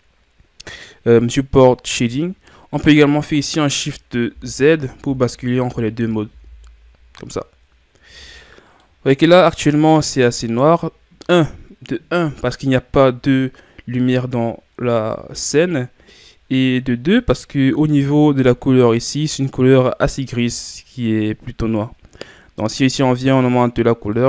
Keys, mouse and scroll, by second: 4.3 shift+z, 5.0 shift+z, 5.7 shift+z, 6.2 shift+z, 8.8-12.5 middle drag, 13.5-14.2 scroll down 1, 14.2-14.9 scroll down 1, 14.9-22.2 middle drag, 22.2 click.